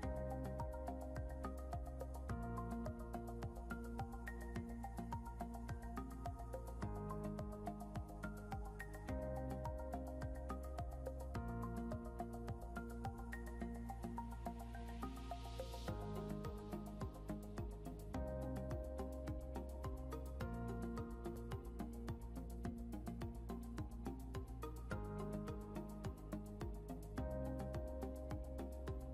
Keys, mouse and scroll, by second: 0.6 click, 2.2-4.7 typing, 5.2 Return, 8.2 ctrl+Num_Lock, 8.4 ctrl+z, 9.4 click, 16.3 click, 20.5 click, 28.2 click, 28.7 scroll down 1.